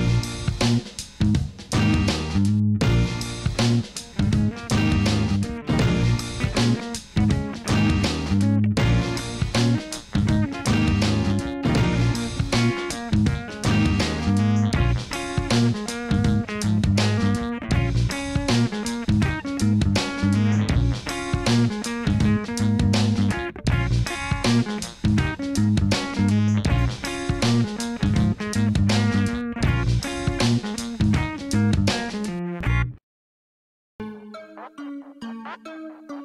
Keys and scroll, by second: 2.4 g, 2.5 y, 4.0 r, 4.1 9, 4.3 Return, 4.9 Tab, 9.9 Tab, 15.3 ctrl+z, 19.1 1, 23.7 g, 24.0 z, 24.8 shift+z, 27.0 g, 27.2 z, 28.9 Tab, 29.3 alt+a, 31.0 g, 31.2 z, 33.3 g, 33.6 z.